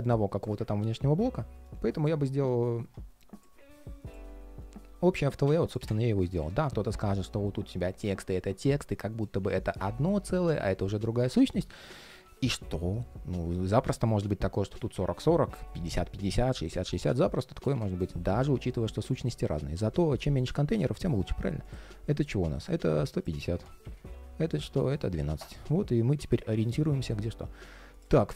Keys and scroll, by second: 0.5 super+z, 11.9 super+z, 20.0 alt+i.